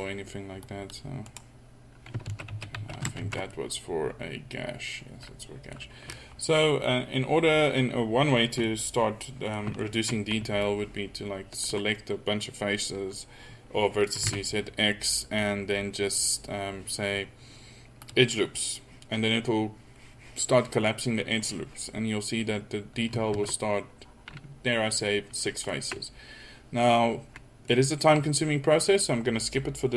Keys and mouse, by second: 2.3 ctrl+z, 2.6 ctrl+z, 2.8 ctrl+z, 3.3 ctrl+z, 3.7-4.2 middle drag, 4.4-5.0 middle drag, 5.1 middle click, 8.5 middle drag, 10.6-12.4 drag, 14.2 x, 23.3 ctrl+z.